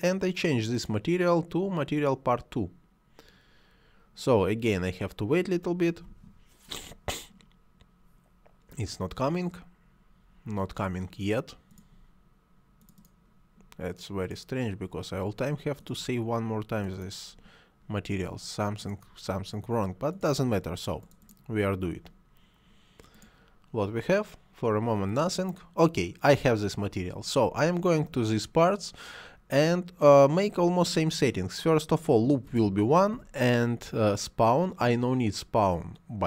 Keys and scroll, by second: 33.0 1.